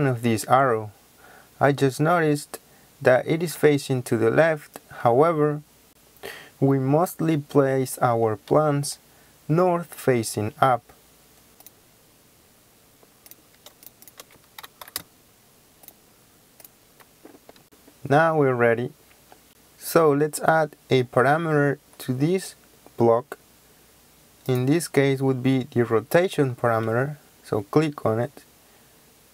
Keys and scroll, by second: 14.6-14.9 typing.